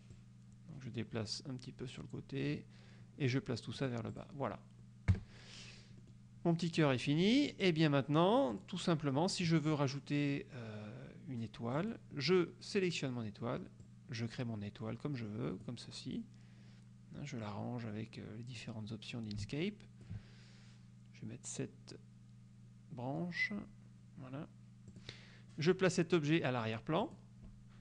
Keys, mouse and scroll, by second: 0.2 click, 3.8 click, 4.3 click, 5.2 KP_Subtract, 6.1 click, 6.4 scroll up 1, 6.6 click, 7.4 click, 8.6 click, 11.9 click, 12.5 click, 14.0-16.0 drag, 17.6-20.3 drag, 22.7 scroll up 2, 23.8 scroll up 2, 25.0 click, 27.1 click.